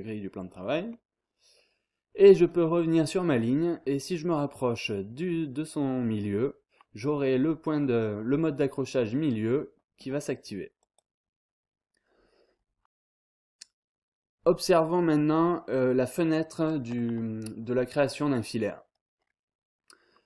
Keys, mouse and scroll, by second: 0.4 click, 0.7-1.4 scroll down 1, 1.5-2.2 scroll up 1, 7.0-7.6 scroll up 1, 9.9-10.6 scroll down 2, 10.8 click.